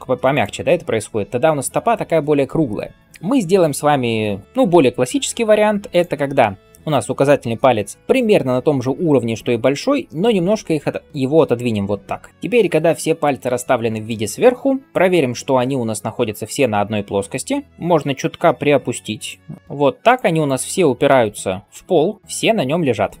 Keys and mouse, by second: 4.0 ctrl+z, 4.4 ctrl+z, 5.7 click, 10.1 g, 12.3 KP_7, 14.8 KP_1, 17.7 g, 19.6 z, 21.0-23.2 middle drag, 21.0 g.